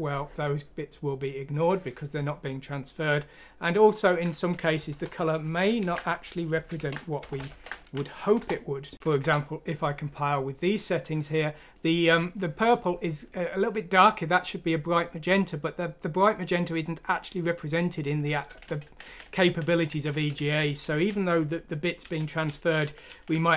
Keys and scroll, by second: 0.4-1.2 typing, 4.8-7.4 typing, 8.2 F6, 8.4 Return, 9.0 F6, 9.2 Return, 18.4 ctrl+z, 18.6 ctrl+z, 18.8 ctrl+z, 19.0 ctrl+z, 19.2 ctrl+z, 19.4 ctrl+z, 19.6 ctrl+z, 19.9 ctrl+z, 20.1 ctrl+z, 20.3 ctrl+z, 20.6 ctrl+z, 20.9 ctrl+z, 21.3 ctrl+z, 22.0 ctrl+z, 22.4 ctrl+z, 22.8-23.5 typing, 23.1 ctrl+z, 23.3 ctrl+z.